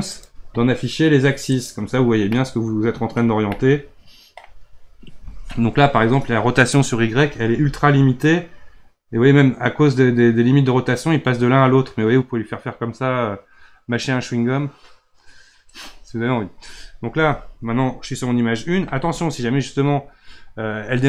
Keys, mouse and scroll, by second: 0.1 click, 1.5 click, 2.3-3.2 middle drag, 3.2 scroll down 2, 3.5-6.5 middle drag, 7.5 r.